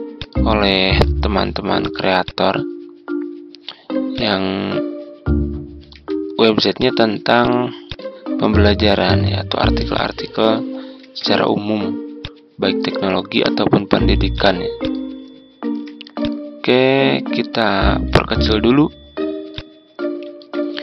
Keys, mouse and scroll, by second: 0.1 shift+click, 0.9 shift+click, 1.7 shift+click, 2.2-3.3 drag, 4.3-5.9 ctrl+drag, 6.7 click, 9.0 Delete, 9.9 click, 10.9 t, 12.1-14.8 drag, 15.4 ctrl+scroll up 1, 16.1-20.4 drag.